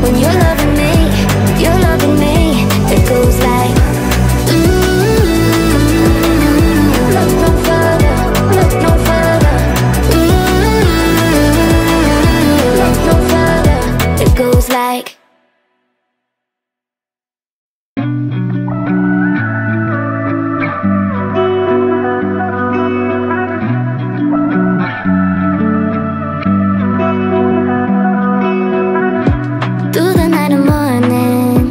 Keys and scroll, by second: 17.8 space, 25.0 BackSpace.